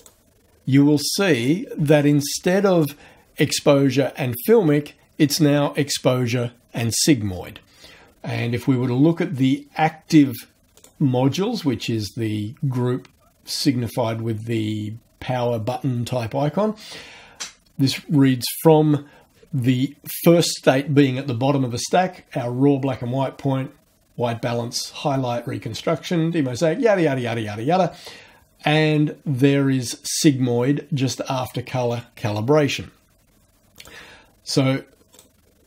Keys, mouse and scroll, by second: 0.0 click, 10.8 click, 33.8 click, 35.2 click.